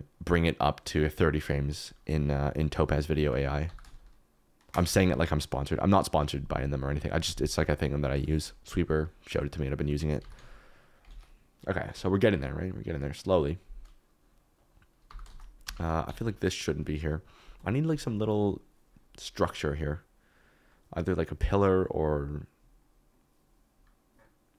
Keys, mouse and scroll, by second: 3.6 g, 3.8 shift+z, 4.9 Escape, 10.6 alt+d, 10.9 z, 11.2 ctrl+s, 15.0 g, 15.2 shift+z, 15.6 Escape, 16.0 x.